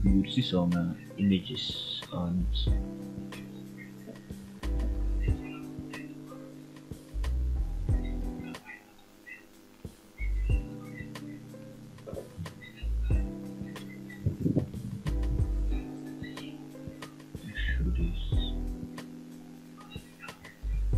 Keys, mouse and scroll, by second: 1.4 click, 2.4 ctrl+click, 3.9 ctrl+z, 4.5 middle click, 5.1 shift+z, 5.5 shift+click, 6.1 shift+click, 7.2 shift+click, 7.7 shift+z, 8.2 middle click, 8.9 f, 9.3 middle click, 10.7 click, 11.1 shift+middle click, 12.6 ctrl+right click, 13.6 shift+middle click, 14.2 middle click, 16.9 ctrl+right click, 19.4 click, 20.1 shift+click, 20.8 shift+z.